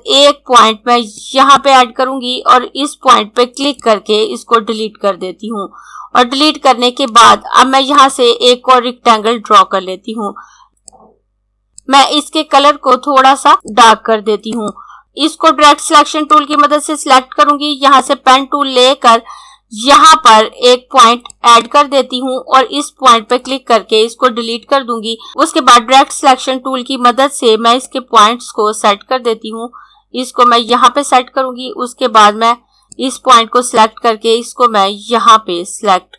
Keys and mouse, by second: 1.1 click, 7.7 click, 10.9 click, 16.3 click, 21.1 click, 27.9 click.